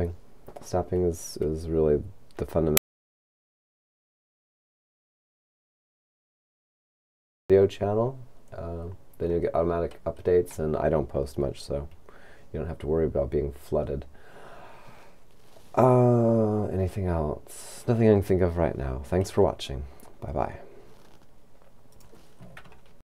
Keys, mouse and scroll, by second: 22.0 click.